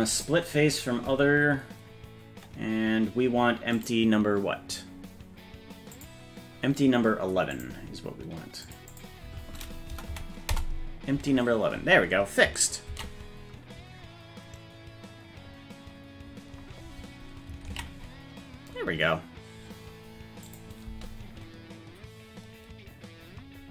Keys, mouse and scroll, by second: 0.1 click, 3.7 click, 5.9 click, 7.5 click, 8.6-11.2 drag, 13.1 ctrl+s, 17.9 ctrl+s, 20.5 click, 20.8 space.